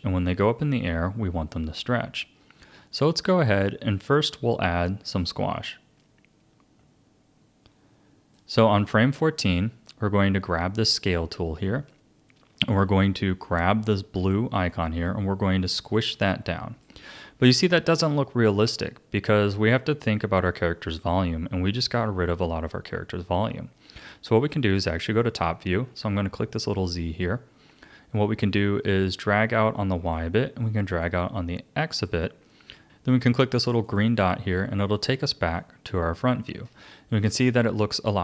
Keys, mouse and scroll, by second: 5.2-8.3 drag, 10.9-14.0 drag, 14.7 click, 26.8 click, 29.0 click, 31.0 click, 33.8 click, 35.6-38.2 shift+middle drag.